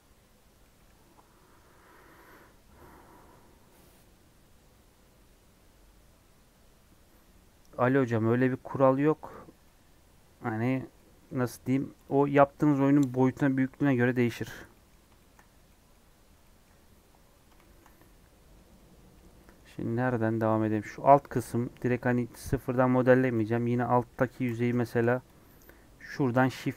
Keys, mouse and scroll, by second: 4.8-8.9 scroll down 1, 8.9 middle click, 9.3 click, 9.4 scroll up 3, 9.6-11.2 middle drag, 11.2 scroll up 3, 12.0 click, 12.6 scroll up 4, 13.0 scroll down 1, 13.0 middle click, 13.6 scroll up 1, 13.7 middle click, 14.0-14.7 scroll down 9, 14.7 middle click, 15.4 scroll up 2, 15.6 middle click, 16.0-16.4 scroll down 3, 16.4 middle click, 16.9 scroll down 1, 17.2 scroll up 3, 17.6-22.3 shift+middle drag, 22.3 click, 22.4 Tab, 23.3 KP_1, 24.5 alt+z, 24.9 shift+middle click, 25.4 click, 26.4 shift+d.